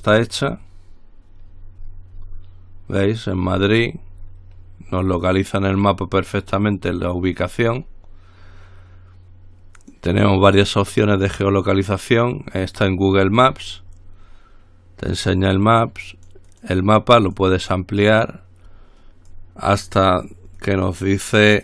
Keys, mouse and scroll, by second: 0.0-0.6 scroll up 1, 1.7-3.0 scroll down 1, 3.5-5.0 scroll up 2, 5.2-6.6 drag, 7.1-7.7 scroll down 2, 8.0-8.6 scroll up 2, 10.0 click, 12.0 click, 13.6-14.2 scroll up 1, 16.3-17.3 drag, 17.4 click, 18.2 click, 19.5-20.7 drag, 20.8-21.6 drag.